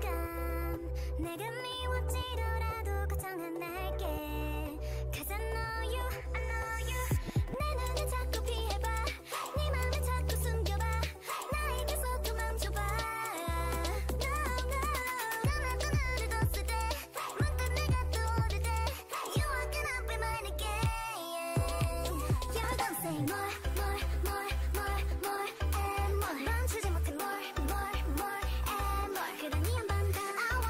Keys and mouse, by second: 1.7 middle click, 5.0 Tab, 6.0-8.3 drag, 8.9-12.6 drag, 13.5-17.6 drag, 18.7 click, 19.6 shift+d, 22.5 Tab, 22.6 click, 23.3 a, 24.6-26.5 drag, 25.8 ctrl+i, 26.1 x, 27.3 click, 28.2 g.